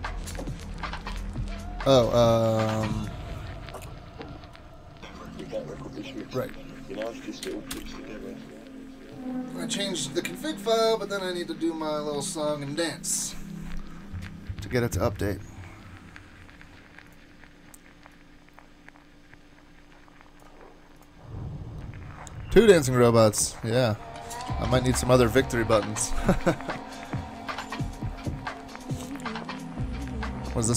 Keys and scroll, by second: 5.4 ctrl+c, 7.7 Return.